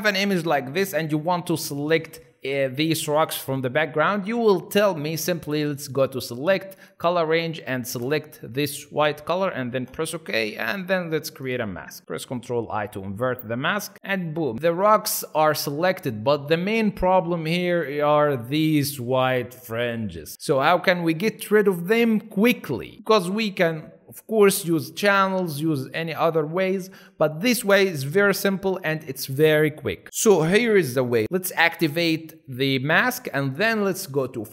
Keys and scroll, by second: 13.2 ctrl+i.